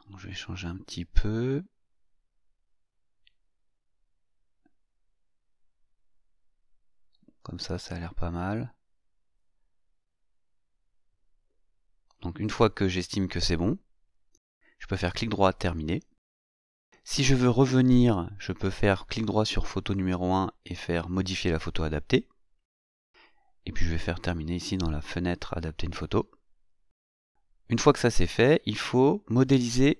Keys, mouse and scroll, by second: 5.9-7.1 scroll up 3, 7.1-7.7 scroll up 1, 7.7-8.7 scroll down 2, 8.7 scroll up 1, 8.9-10.8 scroll down 4, 10.8-11.6 scroll down 1, 12.8 right click, 14.1 click, 17.2 right click, 19.4 click, 23.9 click.